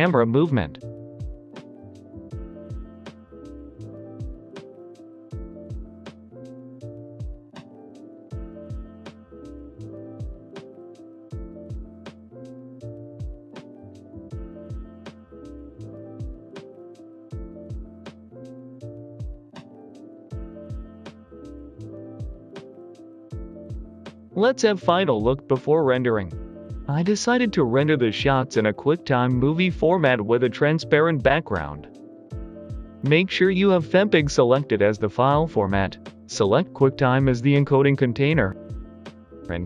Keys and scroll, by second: 0.0-8.4 typing, 7.0 Escape, 7.5 Escape, 8.1 Escape, 9.1 Return, 10.9 g, 10.9 x, 12.0 x, 13.5 x, 15.8-17.3 typing, 19.5-20.5 typing, 19.9 Return, 20.6 Delete, 20.9 Return, 22.3-23.3 typing, 24.6 g, 24.6 z, 29.1 ctrl+s.